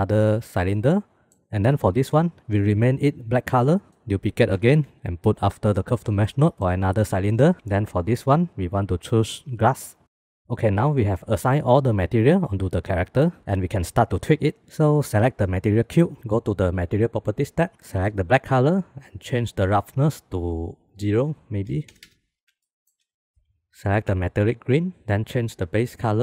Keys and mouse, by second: 0.1 click, 0.6 click, 0.9 middle click, 4.0 middle click, 4.2 middle click, 4.3 shift+d, 5.9 click, 8.7-9.8 drag, 15.4-16.2 drag, 18.3 click, 20.1-21.6 drag, 22.6 shift+click, 24.8 click, 26.0 click.